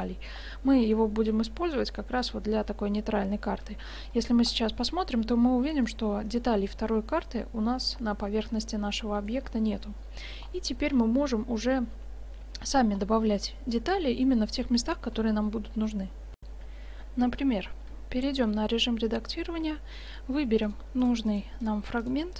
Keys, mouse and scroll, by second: 0.1-2.3 drag, 0.8 g, 2.9 middle click, 3.7 Tab, 4.9 click, 5.3-6.3 middle drag, 6.4 middle click, 7.2-9.3 middle drag, 10.8 Tab, 12.0 Tab, 12.3 Tab, 13.0 middle click, 16.4 F9, 17.9 Tab, 19.5 ctrl+Tab, 20.7-22.3 right drag.